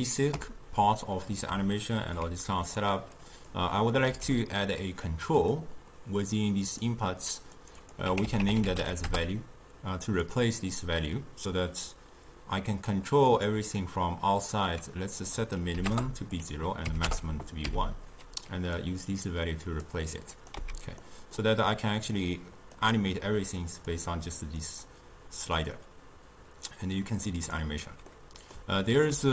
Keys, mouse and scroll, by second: 1.3 click, 2.0 ctrl+h, 2.6-3.3 drag, 4.2 n, 5.5 click, 6.7-7.7 drag, 7.9-13.2 drag, 15.2-17.8 drag, 17.8 n, 18.8-20.5 drag, 20.6 x, 21.1-22.8 middle drag, 22.8 click, 23.8 click, 24.7-27.7 drag, 28.2-29.3 middle drag.